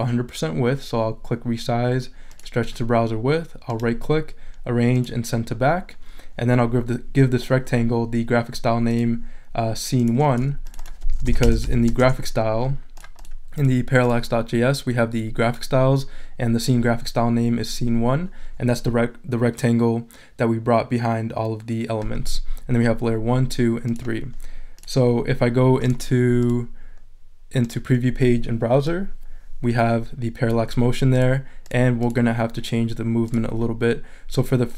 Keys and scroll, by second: 11.1 s, 11.9 l, 12.0 Return.